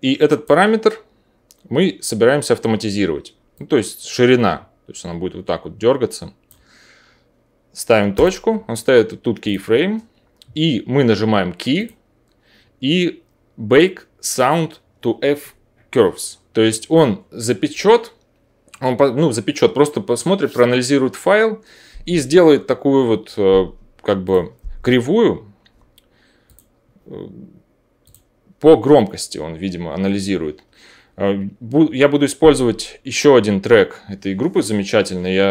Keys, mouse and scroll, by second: 8.2-9.4 drag, 9.5-11.7 drag.